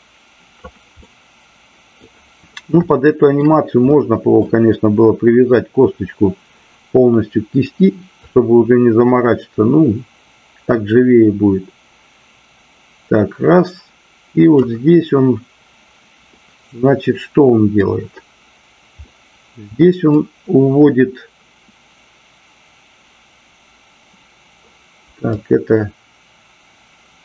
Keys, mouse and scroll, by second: 0.9 middle click, 2.9 shift+middle click, 3.9 middle click, 8.3-14.5 drag, 16.3-17.9 middle drag, 19.1 middle click, 25.2-27.2 drag.